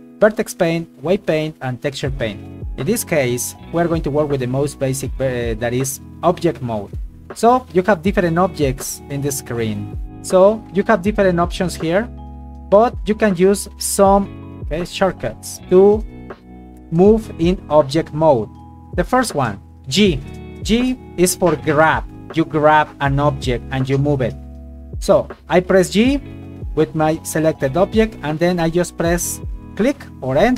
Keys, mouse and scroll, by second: 8.6 shift+a, 10.5 click, 12.9 right click, 20.0 g.